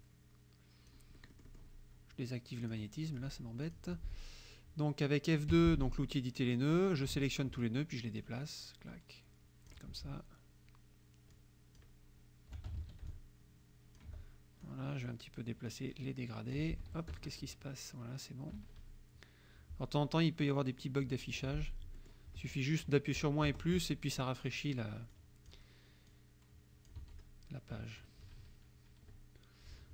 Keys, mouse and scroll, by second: 0.0-1.1 ctrl+drag, 1.2 click, 2.7 click, 3.1 click, 3.7 click, 5.6 F2, 7.1 ctrl+a, 8.2-9.9 alt+drag, 11.4 alt+click, 12.8 ctrl+alt+a, 13.1 ctrl+alt+click, 14.6 click, 15.7-16.7 drag, 16.8 F1, 17.1 KP_Add, 17.4 KP_Subtract, 18.6 KP_Subtract, 20.7 click, 21.4 F2, 22.0 click, 23.2 KP_Subtract, 23.5 KP_Add, 25.2 click, 26.1 click, 27.1 F1, 28.3 KP_Subtract.